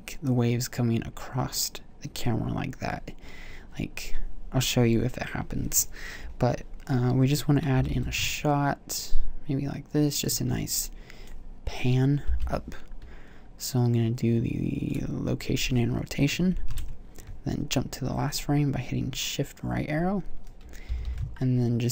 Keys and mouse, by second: 8.0 r, 10.5-12.5 drag, 12.5 i, 16.8 shift+Right, 16.9 shift+Right, 21.1 r.